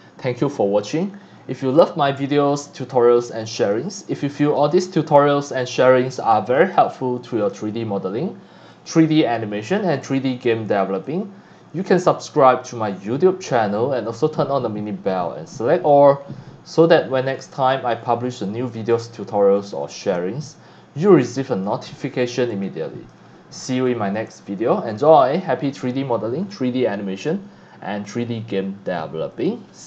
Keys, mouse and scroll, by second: 0.6 scroll up 1, 0.8-1.3 scroll down 2, 1.8 scroll down 1, 2.5-2.9 scroll up 2, 3.0 x, 3.2 click, 3.8 c, 4.2 click, 4.7 scroll down 1, 5.2-6.6 drag, 5.2 x, 5.9 c, 6.8 x, 6.9-7.5 drag, 7.5 c, 8.7 click, 8.7 c, 10.0-10.5 scroll up 3, 10.9 x, 11.6 c, 12.4 scroll up 1, 13.5 scroll down 7, 13.8 scroll up 1, 14.1 x, 14.1-15.9 drag, 14.6 c, 16.8 click, 17.4 scroll up 1, 17.6-18.1 scroll down 2, 18.3 c, 18.4 click, 19.2 scroll up 2, 19.5 scroll down 2, 19.8 x, 19.8 click, 20.1 c, 20.9 click, 21.9 scroll up 1, 22.7 click, 23.3 scroll up 1, 23.7 x, 23.9-25.1 drag, 25.4 scroll down 1, 27.2 click, 29.3 click.